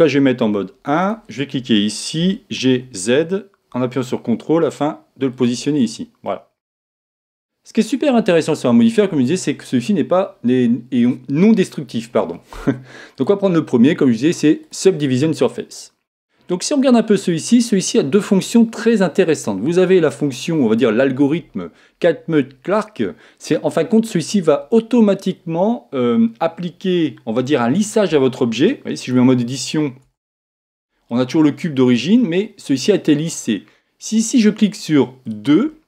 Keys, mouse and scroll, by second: 1.0-2.8 right drag, 2.2 g, 5.5-7.2 drag, 5.8-7.6 middle drag.